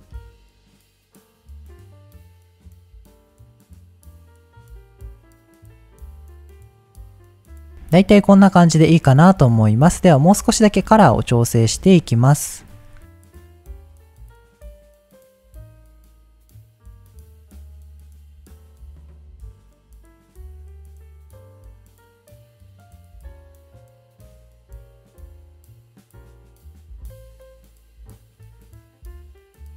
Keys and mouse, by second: 0.5-1.7 drag, 2.0 click, 3.5-4.0 middle drag, 4.0 click, 4.9-6.0 drag, 6.6-8.8 middle drag, 9.2 middle click, 10.9 middle click, 11.6 middle click, 12.5 middle click, 12.7 click, 13.1 middle click, 13.6-18.3 drag, 18.3-18.7 middle drag, 18.7-22.3 drag, 22.5 middle click, 23.9-24.4 drag, 24.7 ctrl+z, 25.5 click, 25.7-29.7 drag.